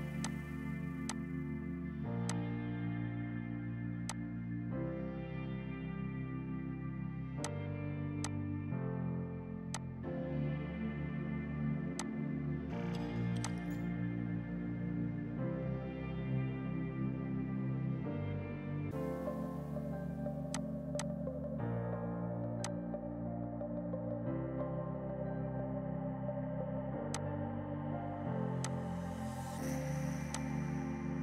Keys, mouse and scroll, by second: 0.3 click, 2.2 F2, 2.3 click, 4.1 click, 5.1 right click, 7.5 click, 8.3 ctrl+click, 9.7 click, 11.0 F4, 12.0 click, 13.3 F2, 13.5 click, 15.7 ctrl+z, 19.0 ctrl+shift+Num_Lock, 19.1 ctrl+shift+z, 20.5 click, 23.5 F4, 27.0 F2, 27.2 click, 28.6 alt+click, 29.5 Delete, 30.4 alt+click.